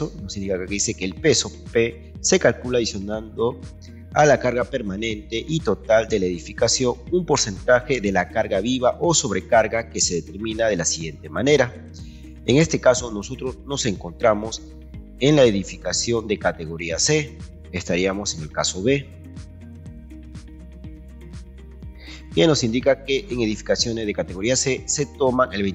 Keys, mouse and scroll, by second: 12.2 Escape, 21.5 ctrl+click.